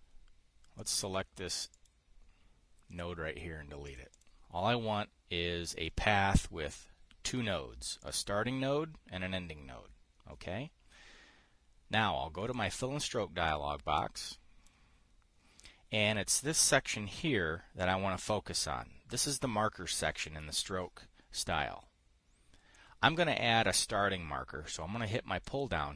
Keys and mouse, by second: 1.3 click, 2.2 click, 3.4 Delete, 4.4 click, 4.7 click, 8.5-13.3 drag, 14.0-15.3 drag, 25.9 click.